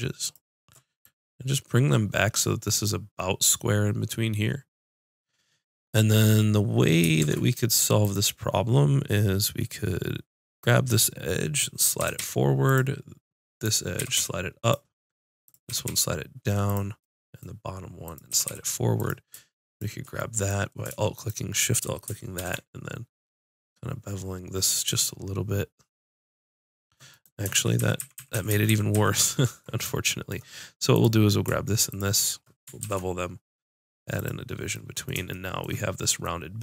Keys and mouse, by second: 7.2 ctrl+Tab, 10.6-12.4 drag, 12.0 g, 12.7-13.7 drag, 14.0 g, 15.6 g, 18.3 g, 20.2-22.3 drag, 22.3 ctrl+b, 27.2 click, 27.5 ctrl+z, 27.8-28.3 ctrl+z, 28.5 ctrl+z, 28.6 ctrl+z, 28.9 ctrl+z, 29.1 ctrl+z, 30.9-32.8 drag, 32.8 ctrl+b.